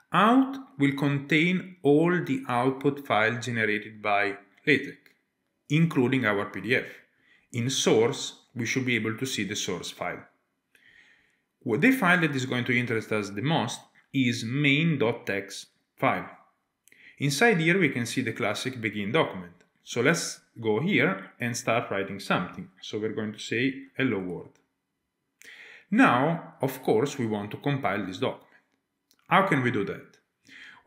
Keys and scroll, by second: 20.7 Tab, 22.1-23.6 typing, 24.2 Tab.